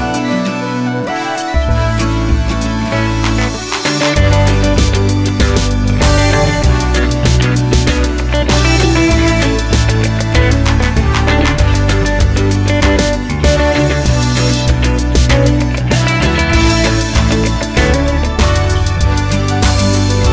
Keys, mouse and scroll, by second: 1.3-1.7 scroll down 1, 2.0 KP_7, 2.3 z, 4.0 click, 4.2 Tab, 4.4-4.7 scroll up 1, 4.7-14.3 shift+middle drag, 4.8-5.7 scroll down 1, 5.7 ctrl+r, 6.7 click, 14.3 shift+click, 14.9 ctrl+z, 15.2 shift+click, 15.7 middle click, 15.8-16.2 scroll up 2, 16.2 shift+click, 16.6-20.3 middle drag, 17.0 scroll down 2, 17.6 KP_7, 18.0 g.